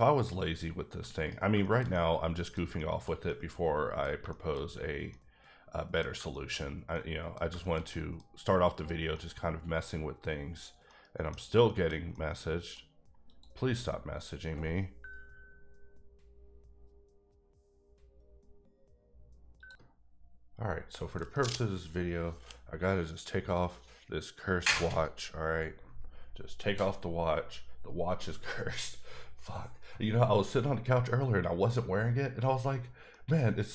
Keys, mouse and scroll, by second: 0.3 click, 0.9 g, 1.2 right click, 1.6 shift+middle click, 4.7-5.1 scroll up 1, 5.1 middle click, 8.3 scroll up 2, 9.1 middle click, 10.9 middle click, 11.4 scroll down 2, 11.6 shift+middle click, 13.3 click, 14.2 middle click, 19.6 click, 33.4 middle click.